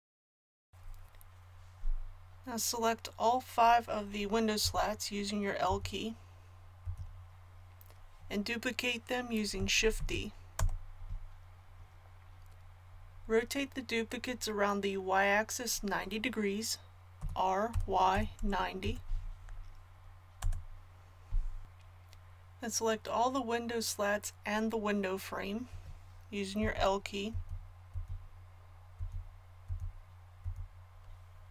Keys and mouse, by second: 0.1 middle click, 0.2 click, 0.6 KP_1, 4.6 l, 5.6 l, 9.9 shift+d, 17.1 r, 26.6 l, 27.2 l.